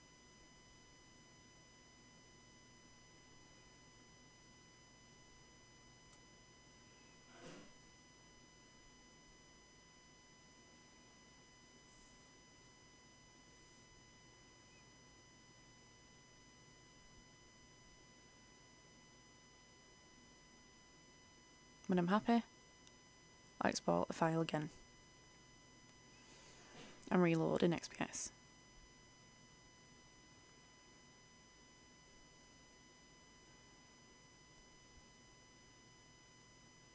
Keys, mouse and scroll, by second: 24.5 ctrl+shift+e, 27.2 click, 27.6 F8, 32.6 ctrl+shift+e, 33.5 ctrl+shift+r.